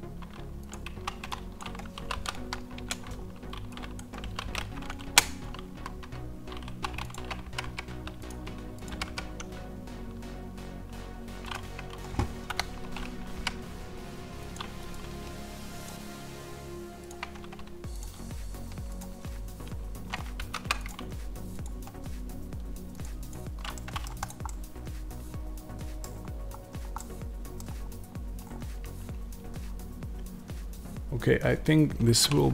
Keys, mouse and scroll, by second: 0.8 1, 1.4 click, 1.8 s, 2.8 KP_Enter, 3.8 click, 4.1 s, 5.0 KP_Enter, 5.6 a, 6.5 2, 7.0 click, 7.3 g, 8.1 click, 8.8 g, 11.4 click, 11.5 Tab, 12.4 KP_1, 13.3 g, 14.4 click, 17.0-18.9 right drag, 18.9-23.6 drag, 20.3 ctrl+z, 23.6 middle click, 24.1 click, 24.3 scroll down 1, 25.9-32.5 middle drag, 25.9 scroll down 1, 26.0-26.5 scroll up 1, 26.5-26.9 scroll down 1, 27.8-28.3 scroll down 1, 28.3-29.1 scroll up 1.